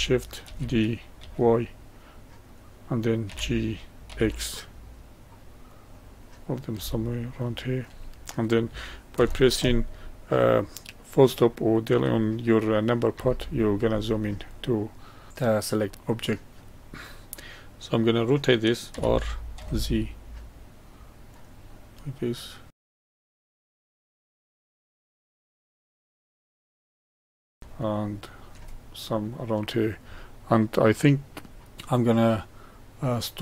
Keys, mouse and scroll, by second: 0.5 shift+d, 3.3 g, 7.1-10.2 shift+middle drag, 13.1 KP_Decimal, 14.5-16.1 middle drag, 16.1 click, 18.9 r, 21.7-22.7 middle drag, 22.7 click, 22.8 middle click, 22.9-27.1 typing, 23.1 middle click, 23.2 scroll up 1, 23.3 middle click, 23.6 shift+middle click, 23.8 click, 23.9 middle click, 24.2 middle click, 24.4 middle click, 24.6 shift+click, 24.7 middle click, 24.8 scroll down 1, 24.9 middle click, 25.1 scroll up 4, 25.1 middle click, 25.3 middle drag, 25.7 middle click, 25.9 middle click, 26.0 middle click, 26.3 middle click, 26.7 middle click, 26.7 scroll up 1, 26.9 middle click, 27.2-30.9 middle drag, 31.7-33.4 middle drag.